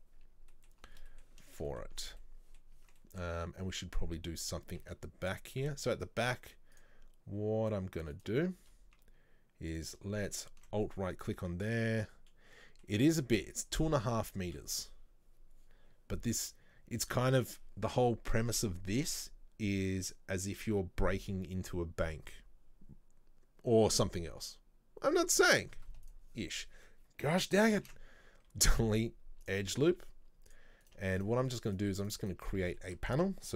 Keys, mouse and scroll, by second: 0.0 middle click, 0.9 scroll up 1, 1.1 middle click, 2.0 scroll up 2, 2.3 middle click, 2.8 Tab, 3.0-5.4 middle drag, 5.4 z, 5.6-6.8 middle drag, 6.8 click, 8.2 right click, 9.8 click, 10.4 alt+right click, 12.1-26.2 middle drag, 27.8 ctrl+z, 29.6 Delete, 30.6 click, 30.9 right click, 31.3 shift+right click, 31.8 shift+right click, 32.1 shift+right click, 32.6-33.5 middle drag.